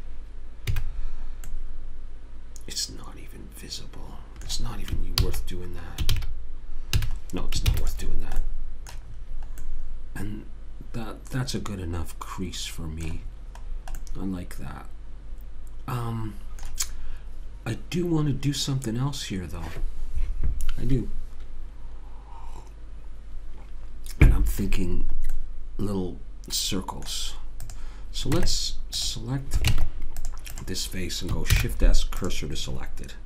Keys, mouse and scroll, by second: 0.8 a, 0.9-2.3 middle drag, 5.3 ctrl+z, 6.2 ctrl+z, 7.0 a, 7.7 ctrl+s, 13.3-14.1 scroll down 1, 14.1-15.8 middle drag, 25.4-26.5 middle drag, 27.9 click, 28.3 Tab, 29.7 ctrl+Tab, 30.6 click, 31.5 shift+s.